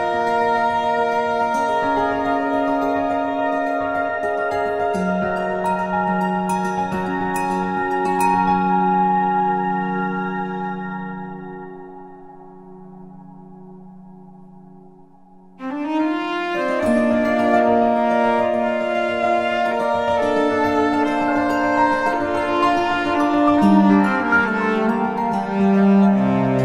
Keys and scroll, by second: 1.7 Return, 12.0 F7, 18.6 space, 20.4 space, 22.6 v, 23.9 ctrl+t, 26.0 Return.